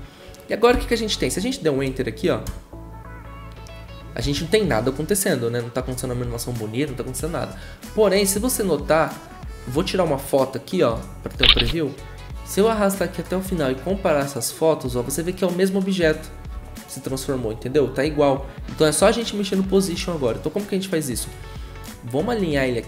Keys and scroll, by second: 2.4 0.